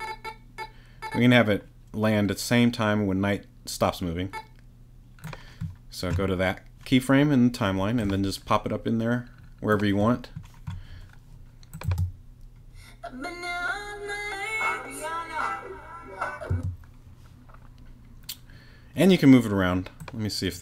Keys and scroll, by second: 11.9 space, 16.5 space.